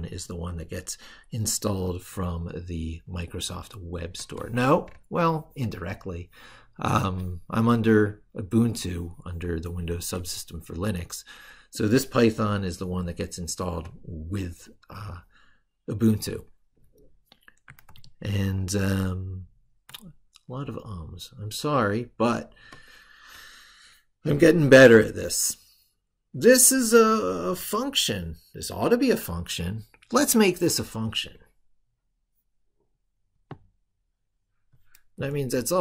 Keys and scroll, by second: 1.6 ctrl+super+Right, 17.6 ctrl+super+Left.